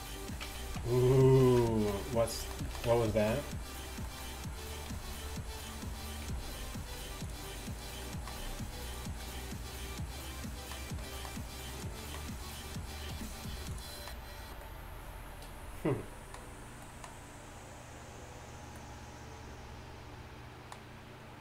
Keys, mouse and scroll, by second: 0.7 ctrl+Tab, 0.7 ctrl+z, 0.7 g, 1.1 ctrl+z, 1.4 ctrl+z, 2.9 shift+Tab, 5.0 g, 6.3 g, 8.5 g, 13.8 r, 15.0 r.